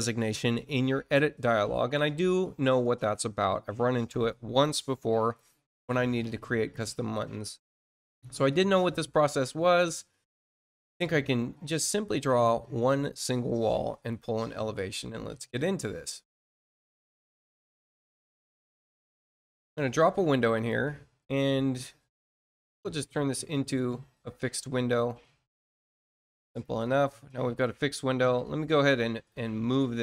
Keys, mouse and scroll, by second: 2.8 click, 7.4 middle click, 8.3 scroll up 2, 9.7 click, 10.8 click, 12.8 scroll up 1, 13.8 click, 14.9 click, 17.3-17.7 scroll up 1, 17.9 scroll up 1, 18.2 middle click, 19.6 click, 20.5 click, 20.9 middle click, 22.7 middle click, 23.6 click, 24.8 click, 26.4 click, 28.4 middle click, 29.9 click.